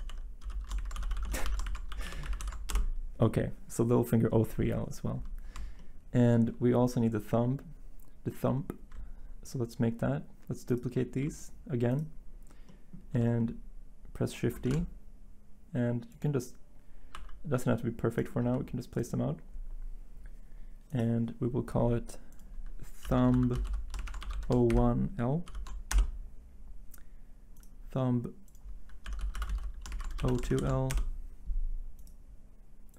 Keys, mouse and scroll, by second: 0.0-2.4 typing, 2.7 Return, 5.9 typing, 14.7 shift+d, 17.1 r, 18.4 g, 23.0-25.4 typing, 25.9 Return, 28.8-30.5 typing, 30.9 Return.